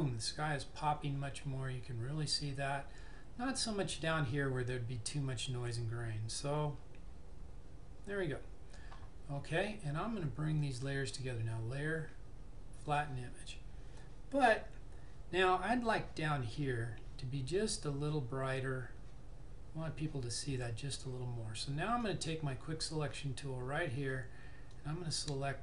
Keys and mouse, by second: 10.7 click, 10.7 typing, 13.1 click, 15.5 typing, 22.2 click, 22.2 typing, 24.8 click.